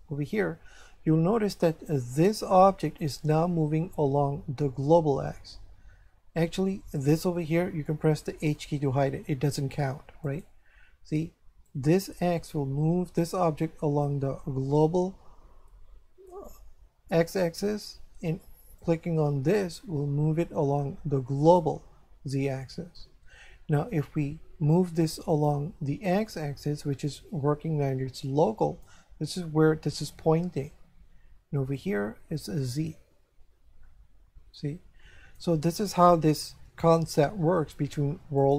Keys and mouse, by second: 7.0 right click, 8.5 h, 10.2 right click, 11.7 click, 18.8 click, 25.3 click, 31.7 click, 37.4 g, 38.4 click.